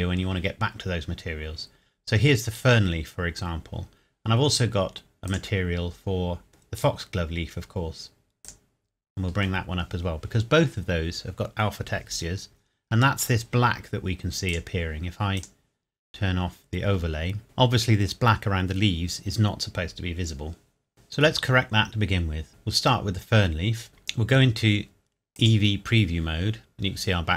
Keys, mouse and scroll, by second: 0.5-2.3 scroll up 1, 3.7-5.3 scroll up 1, 5.3 click, 8.5 click, 12.3-13.2 scroll down 2, 13.2-14.3 scroll down 1, 14.5 click, 20.9 click, 25.4 click.